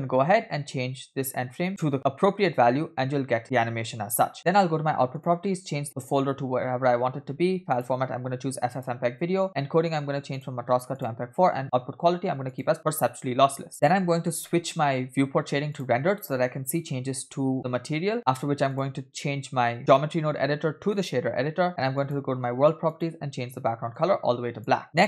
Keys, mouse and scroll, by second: 1.7-4.3 drag, 4.3-5.0 scroll down 2, 5.2 click, 5.8 /, 6.8-7.6 scroll down 1, 7.6 scroll down 1, 7.7-8.9 drag, 9.1-9.4 scroll down 2, 9.4 click, 10.4-11.2 drag, 11.6-12.6 drag, 13.7 scroll down 2, 13.9-14.3 shift+middle drag, 16.0 click, 18.7-21.2 drag, 22.0 click, 22.9 click, 24.8 middle click, 24.8 scroll up 5.